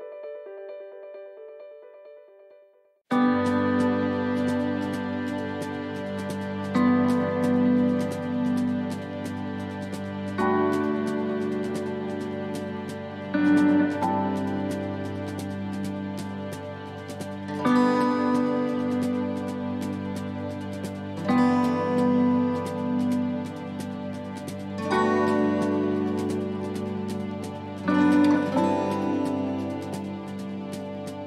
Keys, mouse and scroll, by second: 0.3 click, 5.0 right click, 5.7 click, 7.8 right click, 8.8 right click, 10.6 ctrl+r, 12.5 right click, 13.5 click, 15.2 right click, 16.3 click, 19.6 ctrl+r, 20.8 s, 23.8 ctrl+r, 30.0 right click, 30.9 shift+right click.